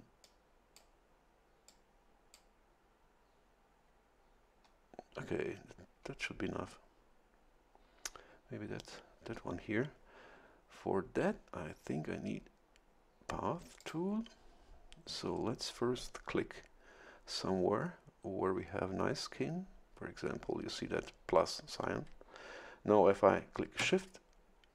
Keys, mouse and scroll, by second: 0.2 click, 1.7 click, 13.8 click.